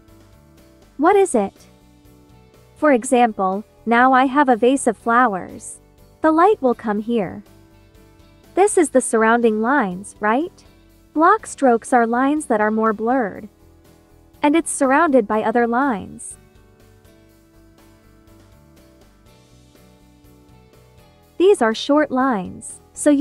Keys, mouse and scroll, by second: 3.7-23.2 drag.